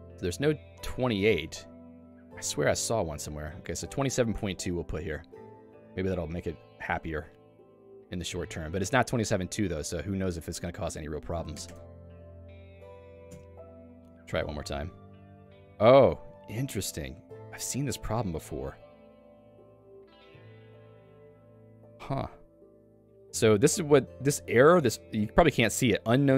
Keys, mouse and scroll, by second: 4.3 q, 5.7 click, 6.4 click, 7.3 r, 7.8 ctrl+s, 12.5 Up, 13.3 Return.